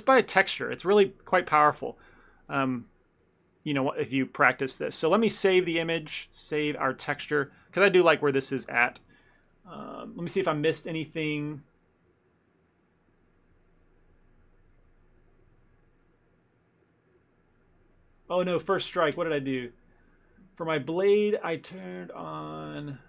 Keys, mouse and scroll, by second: 0.0 ctrl+middle click, 0.3 ctrl+middle click, 0.7 middle click, 0.9 middle click, 1.3 ctrl+middle click, 1.5 shift+middle click, 1.6 shift+middle click, 1.7 middle click, 2.4 click, 2.6 click, 2.9 middle click, 3.3 click, 3.4 click, 3.8 ctrl+middle click, 4.0 ctrl+middle click, 4.3 ctrl+middle click, 4.3 shift+middle click, 4.4 middle click, 4.6 middle click, 5.9 click, 7.8 ctrl+middle click, 8.1 middle click.